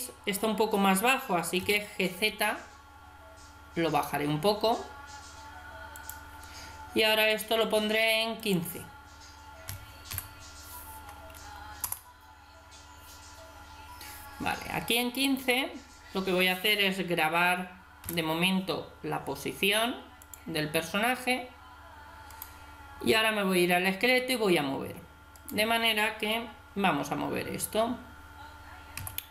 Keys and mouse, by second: 1.6 g, 8.4-10.3 drag, 18.1 i, 22.3 right click, 25.4 right click, 29.0 g.